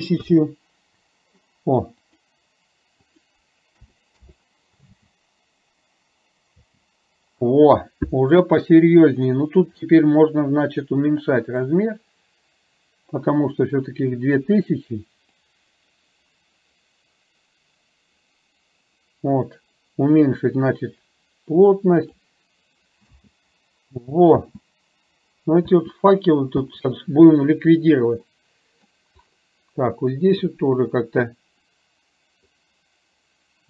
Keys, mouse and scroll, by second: 2.1-4.2 drag, 5.0 space, 6.7 space, 11.9-14.5 drag, 15.4-22.2 drag, 23.2 space, 24.5 space, 25.7 space, 26.6 space, 28.4 middle click, 32.6-33.6 drag.